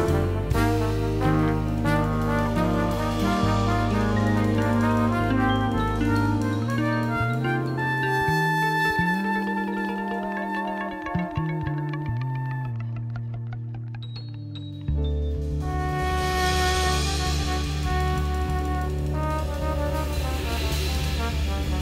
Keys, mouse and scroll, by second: 3.2 click, 5.7 right click, 6.4 click, 7.3 click, 11.0 click, 12.8 click, 14.2 click.